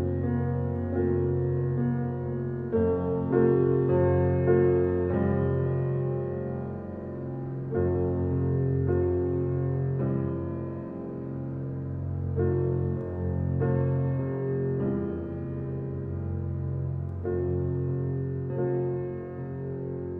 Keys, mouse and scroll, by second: 16.5 ctrl+alt+scroll down 1, 17.4 ctrl+alt+scroll up 1, 18.9-20.1 drag.